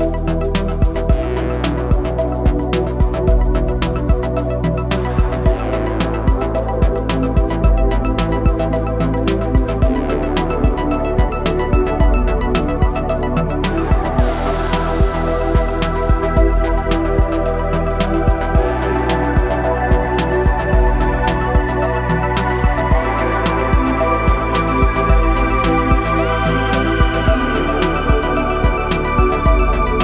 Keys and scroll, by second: 4.5 Delete, 10.3 Delete, 17.5 ctrl+shift+b, 27.4 ctrl+shift+b.